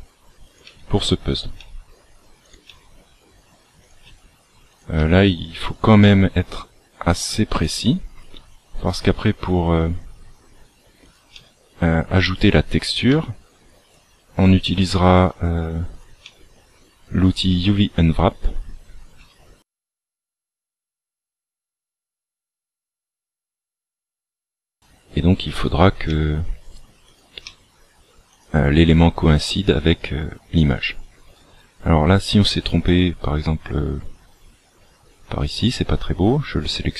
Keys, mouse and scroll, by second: 0.6 e, 2.6 e, 4.0 e, 6.0 e, 8.3 e, 11.3 e, 13.1 e, 14.0 e, 15.1 e, 16.2 e, 17.4 e, 19.1 e, 21.9 e, 23.1 e, 26.1 e, 29.2 e, 35.4 right click.